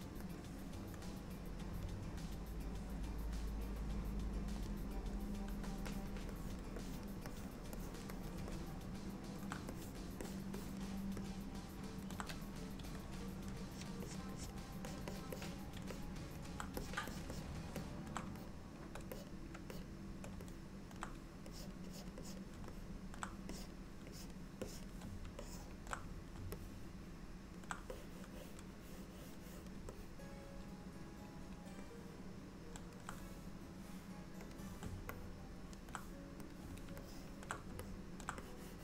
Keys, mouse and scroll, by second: 3.2 click, 4.7 click, 6.0 click, 6.4 click, 6.9 click, 7.4 click, 7.8 click, 8.2 click, 8.6 middle click, 9.8 click, 10.3 click, 10.6 click, 11.3 middle click, 12.8 f, 13.8 click, 14.1 click, 14.4 click, 14.9 click, 15.1 click, 15.4 click, 16.0 middle click, 16.9 click, 17.2 click, 17.4 click, 17.8 middle click, 18.4 shift+click, 18.9 shift+click, 19.2 click, 19.8 shift+click, 20.5 middle click, 21.6 click, 22.0 click, 22.3 click, 22.6 shift+click, 22.8 middle click, 23.6 click, 24.2 click, 24.7 click, 25.5 shift+middle click, 26.6 middle click, 28.0 click, 30.0 alt+middle click, 31.9 middle click, 34.6 click, 35.2 middle click, 36.6 click, 37.1 shift+middle click, 37.9 middle click, 38.5 click.